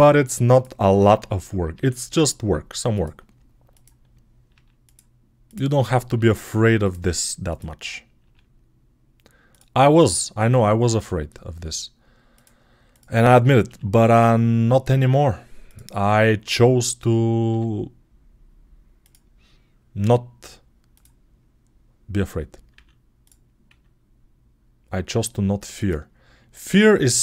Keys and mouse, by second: 0.3 click, 1.6 e, 3.6 click, 4.4 g, 5.3 click, 6.0 g, 8.1 g, 8.4-9.8 middle drag, 9.8 click, 9.9-12.8 middle drag, 10.8 e, 12.8 click, 13.5-15.5 middle drag, 13.5 g, 15.5 click, 15.6-20.8 middle drag, 17.3 f, 20.8 click, 20.9-27.2 middle drag, 22.6 e, 23.6 s.